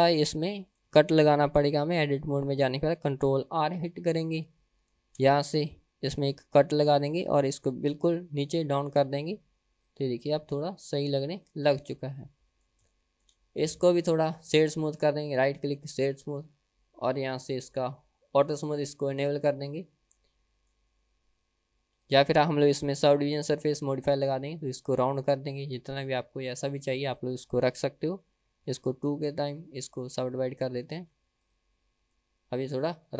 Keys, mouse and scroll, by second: 0.4-1.0 shift+middle drag, 1.4-1.8 middle drag, 2.0 Tab, 3.9 KP_1, 5.0 ctrl+r, 9.4 Tab, 9.9 click, 10.2 scroll up 1, 10.3-11.3 middle drag, 11.3-11.6 scroll down 1, 11.6-12.8 middle drag, 13.0-13.4 shift+middle drag, 14.0 click, 14.8-15.6 right drag, 17.1 click, 18.4 click, 19.0 click, 19.8-20.8 middle drag, 21.9 click, 23.4 ctrl+1, 24.0 click, 24.4-26.2 middle drag, 26.6 scroll up 1, 29.5 ctrl+click, 30.3 click, 31.0 ctrl+2, 31.5 click, 32.3-33.1 middle drag.